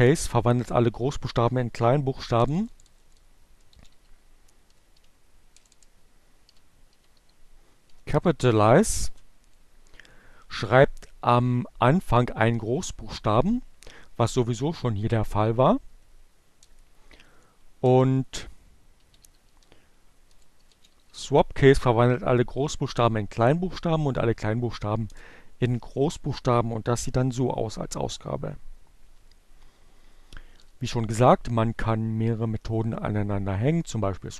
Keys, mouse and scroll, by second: 0.0 BackSpace, 2.9-5.2 typing, 6.3-7.9 typing, 14.6 Up, 15.4 BackSpace, 17.0-18.0 typing, 19.5-20.8 typing, 22.5 Return, 27.5 Up, 32.4-33.3 typing.